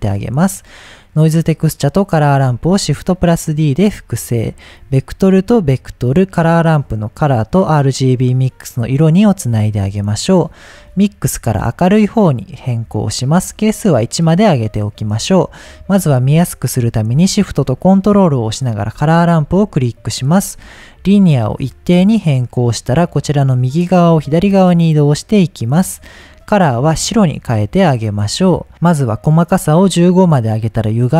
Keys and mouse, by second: 0.3-0.6 drag, 2.7 shift+d, 3.8 click, 4.7-6.0 drag, 6.8-8.0 drag, 10.9-12.6 drag, 13.5 click, 18.6 ctrl+shift+click, 21.1-22.3 drag, 23.3-25.4 drag, 26.1-28.0 drag, 29.7 click, 30.8-31.1 drag.